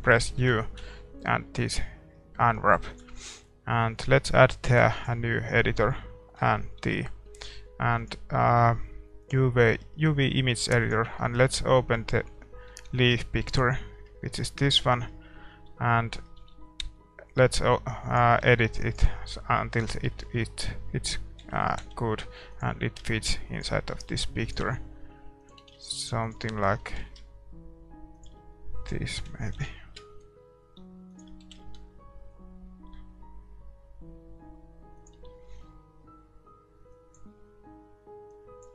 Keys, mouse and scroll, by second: 1.7 u, 2.1-2.5 scroll down 1, 2.5-4.2 middle drag, 4.2 ctrl+s, 4.2-13.6 drag, 11.0-13.6 middle drag, 15.7-18.4 middle drag, 15.7 a, 16.4 a, 16.8 r, 18.4 g, 21.4 middle click, 21.4 s, 22.7 g, 24.0 r, 24.7 s, 25.6 g, 26.8 s, 29.2 s, 31.4 g, 36.9-38.7 drag, 36.9-38.3 middle drag.